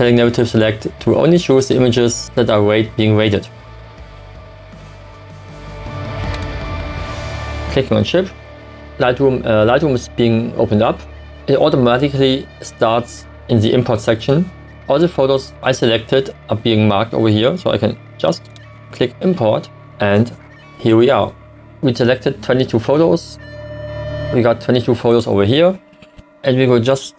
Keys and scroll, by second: 26.2 d.